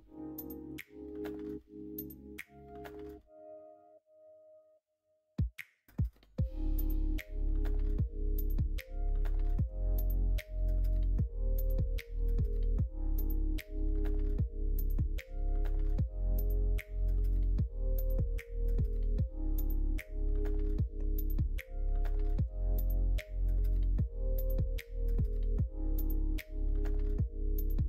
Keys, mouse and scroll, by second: 2.9-6.0 middle drag, 6.5 middle click, 7.4-8.5 middle drag, 8.9 middle click, 22.2 middle click, 22.7 middle click, 23.0 middle click, 23.7 shift+middle click, 24.8 middle click, 25.3 middle click, 26.8 Tab.